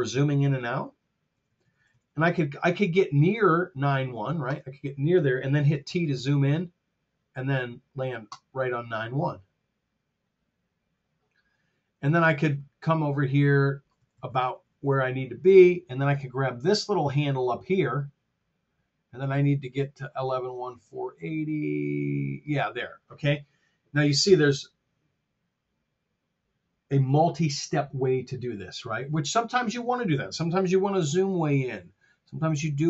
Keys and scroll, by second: 1.2 t, 5.6 t, 14.1 r, 31.1 t.